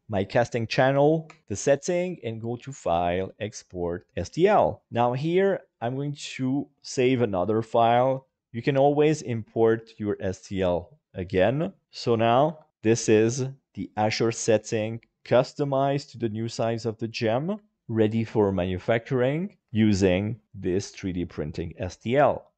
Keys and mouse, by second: 0.2 middle click, 1.1 shift+right click, 2.4-4.1 drag, 8.4-10.2 drag, 12.5 KP_Divide, 12.7-15.9 middle drag, 17.7-22.5 middle drag.